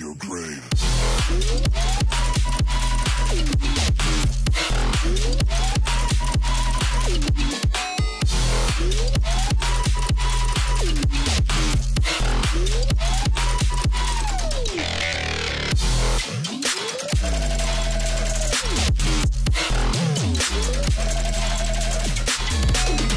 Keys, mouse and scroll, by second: 1.1 alt+scroll down 1, 2.9 click, 5.8 click, 10.0-10.5 scroll down 1, 10.5-11.1 scroll up 1, 11.1 click, 13.9-23.1 drag.